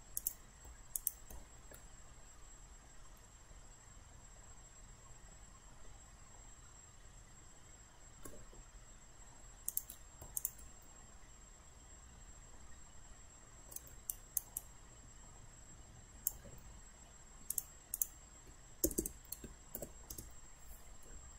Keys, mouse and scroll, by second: 0.2 click, 1.0 shift+click, 2.6-8.7 middle drag, 9.7 click, 10.4 shift+click, 11.3-13.8 middle drag, 14.1 alt+right click, 14.6-16.3 alt+drag, 17.5 click, 18.9 BackSpace, 19.8 BackSpace, 20.1 Return.